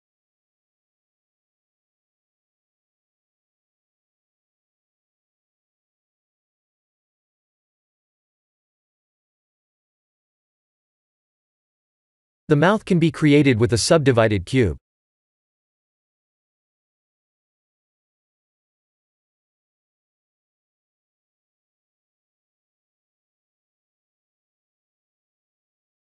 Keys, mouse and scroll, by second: 0.1 shift+d, 2.2 KP_3, 2.5 KP_7, 3.9 g, 5.6 KP_3, 6.9 KP_1, 8.3 g, 10.7 KP_1, 11.5 click, 11.9-13.2 scroll down 4, 13.2 scroll down 2, 13.8 click, 14.1 shift+a, 17.1 s, 21.7 Tab, 22.1 ctrl+r, 23.0 shift+z, 23.6-24.0 scroll up 4, 24.0 shift+middle click, 25.4 click, 25.9 3.